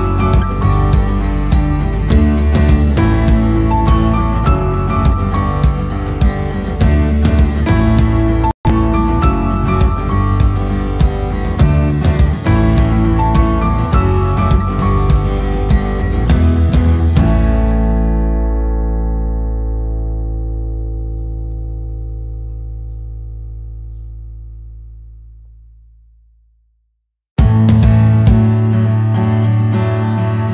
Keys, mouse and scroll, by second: 3.3 k, 9.4 click, 10.1 k, 15.3 middle click, 17.3 k, 20.0 k, 23.3 click, 24.2 k, 29.2 click, 29.4 click, 30.3 shift+click, 30.4 shift+click.